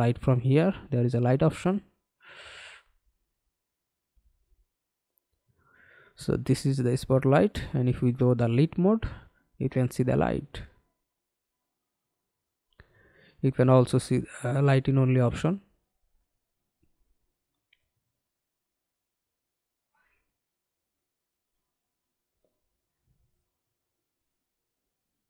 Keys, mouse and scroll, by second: 3.7 Delete, 6.9 f, 9.3 alt+click, 16.8 middle click, 21.8 BackSpace.